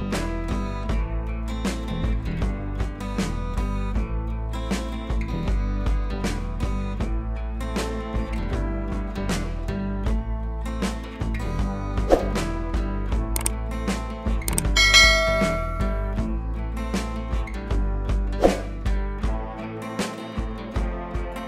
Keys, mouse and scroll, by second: 1.7 click, 5.5 click, 6.1 scroll down 1, 9.4-11.9 drag, 13.4 ctrl+t, 13.8-15.6 drag, 20.3 Right, 21.3 click.